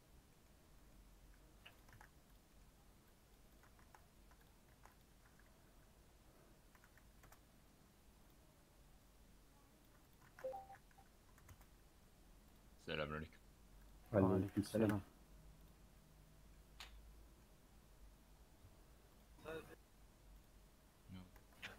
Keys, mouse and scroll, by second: 1.7 click, 1.9 shift+d, 3.0-8.3 drag, 8.9-11.0 drag, 11.0 shift+a, 13.5 scroll up 1, 13.8-15.9 drag, 15.9 middle click, 16.5 scroll up 2, 16.8 middle click, 17.5 scroll down 1, 20.3 click, 21.3 Tab.